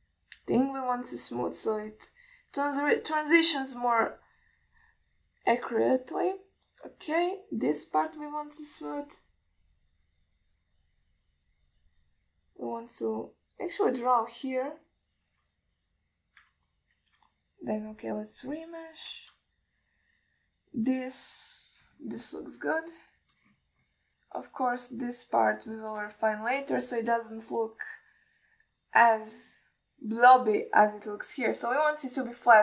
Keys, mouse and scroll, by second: 1.8-6.6 shift+drag, 8.7-11.8 shift+drag, 13.9 drag, 14.3 click, 14.7 click, 15.5 click, 15.8 click, 17.1 ctrl+y, 19.0-19.9 drag, 27.0 middle click, 27.4 shift+middle click, 28.2-29.2 middle drag.